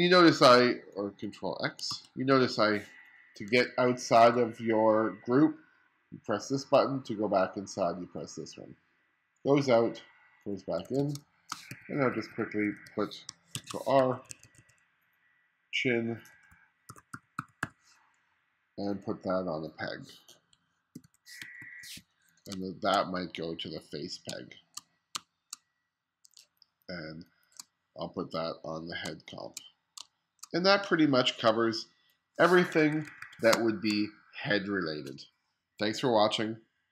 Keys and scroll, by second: 1.9 super+x, 3.6 1, 4.2 1, 10.9 1, 11.2 space, 11.7 2, 13.1 2, 13.6 super+v, 14.0 2, 16.7-18.2 typing, 21.0 super+p, 21.5 1, 22.3 space, 24.3 space, 25.2 space, 26.4 space, 29.1 space, 30.0 space, 33.0 1, 33.6 space.